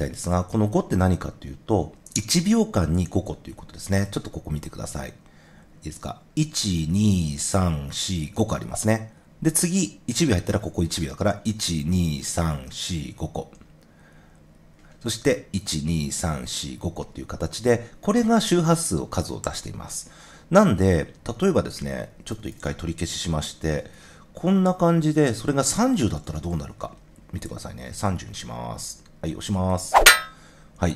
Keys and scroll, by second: 22.4 super+z, 23.7 super+z, 25.9-26.9 typing.